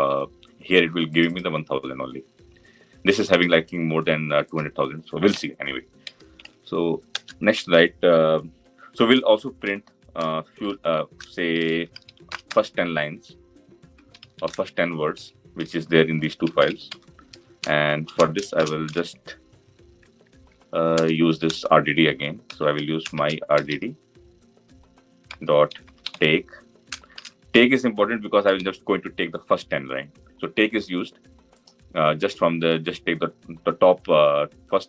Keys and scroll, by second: 6.9 Return.